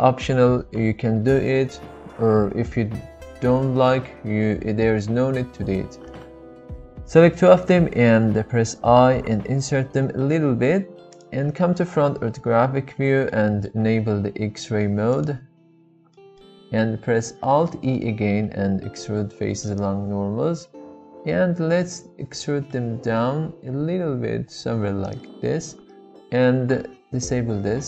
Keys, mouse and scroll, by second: 11.1 click, 12.0 KP_1, 13.3 shift+middle click, 15.1 click, 16.2 shift+middle click, 17.6 alt+e, 25.0 click.